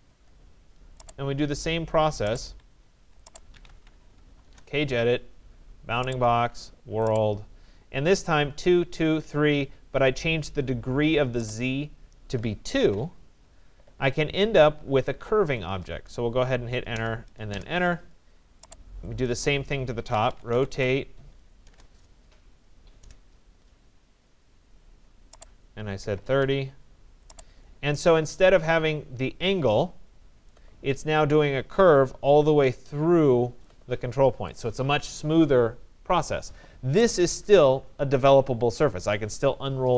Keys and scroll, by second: 2.4 Escape, 4.5 Return, 12.2 2, 12.8 Return, 16.5 Return, 21.2 BackSpace, 21.7 Return, 23.1 BackSpace, 26.1 0, 26.5 Return.